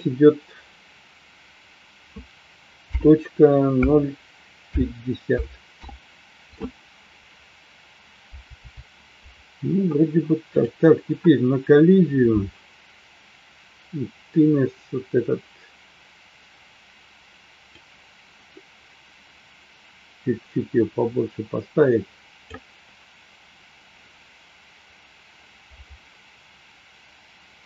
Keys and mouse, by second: 17.8-22.4 drag.